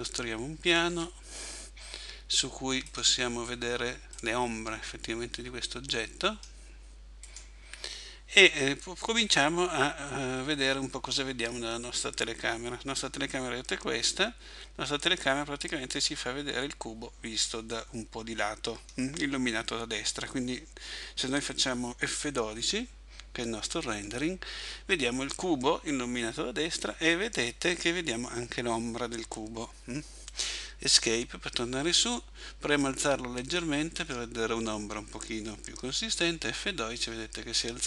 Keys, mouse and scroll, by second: 0.9 s, 3.0 click, 7.2 right click, 13.3 middle click, 30.8 Escape, 32.8 click.